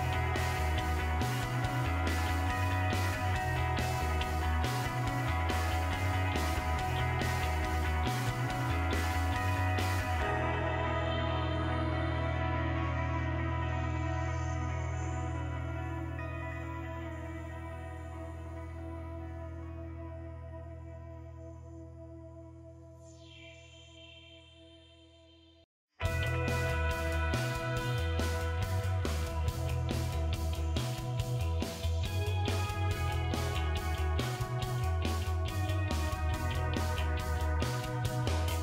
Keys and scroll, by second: 27.5-36.6 typing.